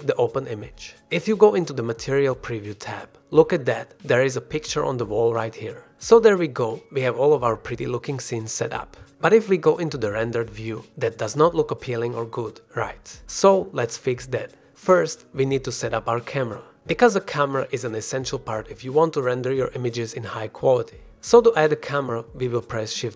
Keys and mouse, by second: 3.6 drag, 7.0 click, 7.7-8.2 drag, 8.9 drag, 9.1 middle click, 10.8 shift+click, 14.8-15.6 middle drag, 16.0-16.4 middle drag, 18.3 middle drag, 21.3 middle click, 22.4 middle click.